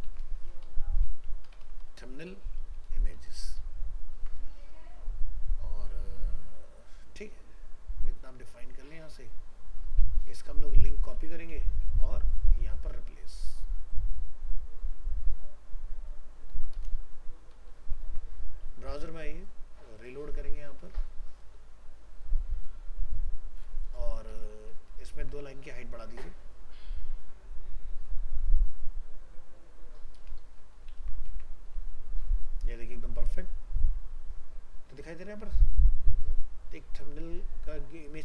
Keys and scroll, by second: 0.1 ctrl+shift+Left, 4.2 ctrl+s, 10.3 alt+f, 11.1 ctrl+c, 16.5 ctrl+v, 25.2 alt+Tab, 31.0 ctrl+s, 31.3 alt+Tab.